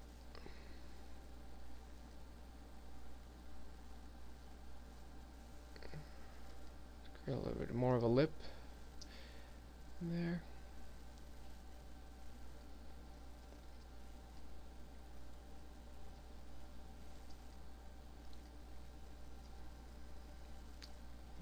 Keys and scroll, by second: 8.2 s.